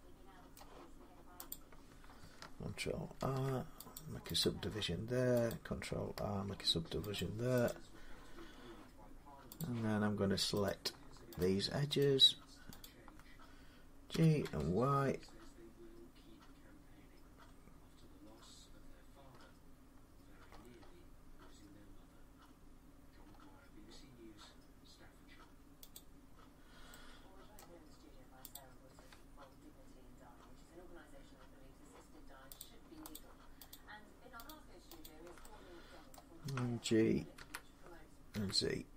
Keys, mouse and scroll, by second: 0.0 scroll, 2.0 click, 3.0 ctrl+r, 3.8 click, 4.1 middle click, 4.2 click, 5.3 click, 5.6 click, 6.3 ctrl+r, 7.0 click, 7.5 click, 9.4 click, 10.5 click, 11.2 shift+click, 11.3 shift+click, 11.8 click, 12.7 click, 13.9 typing, 19.2 scroll up 3, 20.3-21.2 scroll down 8, 21.2 scroll down 1, 23.1-23.6 scroll up 3, 23.8 scroll up 6, 24.2 scroll, 25.8 click, 27.4-28.3 middle click, 29.4 click, 32.4 click, 33.0 shift+click, 34.3 click, 34.9 shift+click, 36.0 middle click, 37.2-38.1 typing.